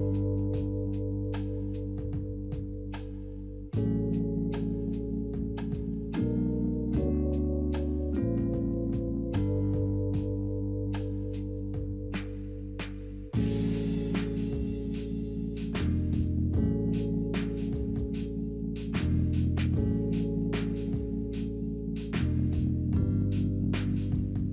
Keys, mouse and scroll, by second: 7.3 scroll up 2, 7.9 scroll down 2, 8.7-9.2 scroll up 2, 9.2 scroll down 3, 10.7 double click, 11.1 2, 11.2 Return, 16.1 double click, 16.2 double click, 16.7-17.5 typing, 18.3-18.8 scroll up 2, 19.1-19.4 scroll down 3.